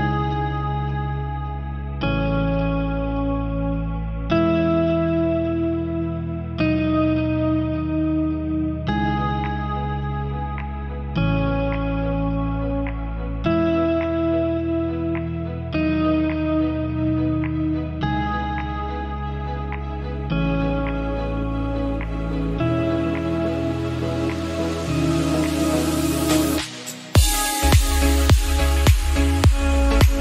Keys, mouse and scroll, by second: 5.0-6.2 middle drag, 6.2-9.7 drag, 10.8-12.9 drag, 12.9-14.3 middle drag, 14.9 click, 15.5 click, 16.0-17.5 middle drag, 17.8 click, 18.7-20.2 drag, 20.7-22.2 drag, 22.2 ctrl+z, 22.7-24.8 drag, 24.8 ctrl+z, 25.5 right click, 26.3-28.5 drag, 28.5-30.0 middle drag.